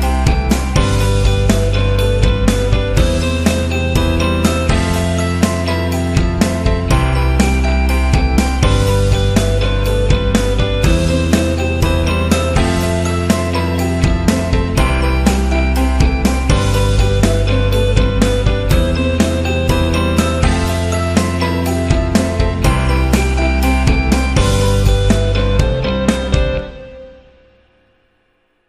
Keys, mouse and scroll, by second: 0.3 click, 1.0 click, 1.5 click, 2.7 click, 3.4 click, 5.7 click, 6.2 click, 6.7 click, 6.7-8.5 typing, 8.0 click, 8.4 click, 9.1 click, 10.2 click, 11.0 click, 11.3 click, 12.3 click, 13.4 click, 14.3 shift+click, 15.4 click, 16.2 click, 16.8 click, 18.4 alt+scroll down 1, 18.8 space, 19.1 click, 21.2 alt+scroll up 1, 21.6 space, 21.7 click, 22.1 space, 22.9 alt+scroll down 1, 24.6 click, 25.1 click, 26.9 click, 28.5 click.